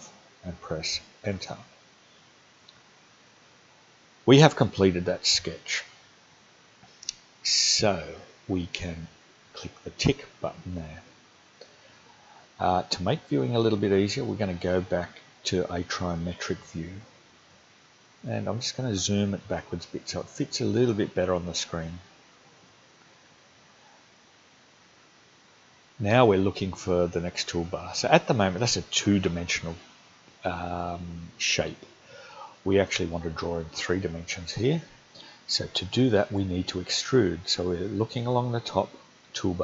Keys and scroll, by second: 1.3 Return.